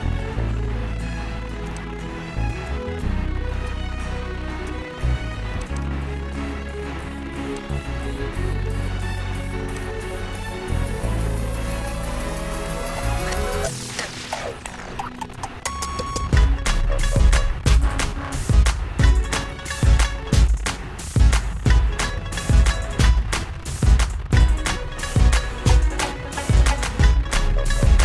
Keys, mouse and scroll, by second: 3.6 click, 5.8 click, 6.1 click, 8.8 click, 10.0 click, 11.9 Up, 13.3 Up, 14.6 Up, 14.8 Up, 15.0 Up, 16.3 Up, 16.5 Up, 16.7 Up, 17.9 Up, 18.1 Up, 19.5 Up, 19.7 Up, 21.4 Up, 22.7 Up, 26.4 click, 27.6 click.